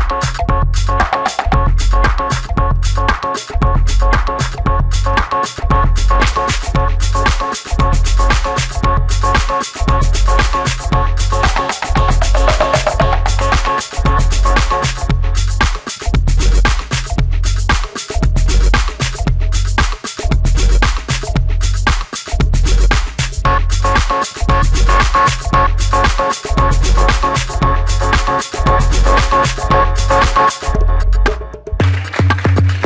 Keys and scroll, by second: 4.8 v, 6.7 1, 11.6-12.5 typing, 17.3 space, 18.1 shift+c, 22.9 space, 23.0 Escape, 29.4 space, 29.4 Escape.